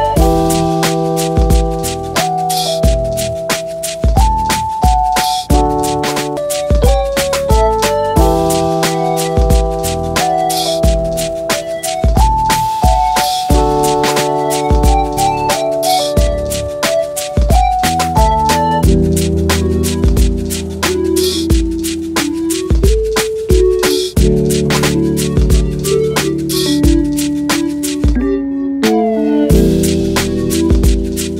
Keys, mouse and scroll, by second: 1.3 ctrl+Tab, 2.6-2.9 middle drag, 4.5 ctrl+Tab, 7.0 middle click, 8.3-8.7 middle drag, 9.3-11.0 middle drag, 11.2 click, 13.2 click, 14.2 middle click, 26.8 3, 27.4 c, 28.3 click, 28.8 c, 30.0 right click, 30.4 right click, 31.2 click.